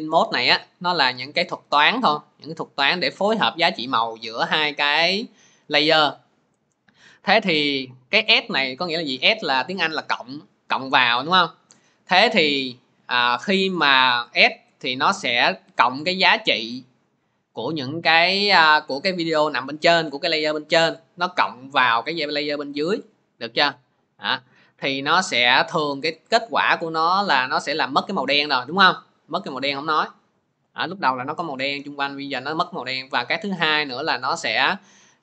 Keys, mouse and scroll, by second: 0.3 click, 12.4 click, 13.6 click, 13.6 scroll, 22.3 click, 23.0 click, 24.1 click, 25.2 middle click, 25.9 middle click, 27.1 middle click, 27.3-28.6 scroll, 29.5 click, 29.5-29.9 scroll.